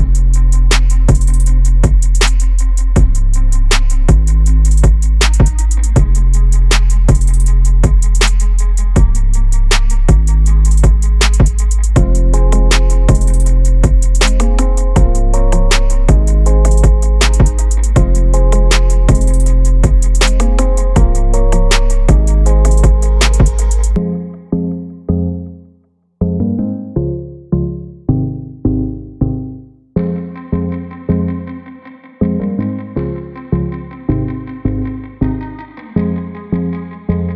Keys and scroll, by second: 2.1 ctrl+0.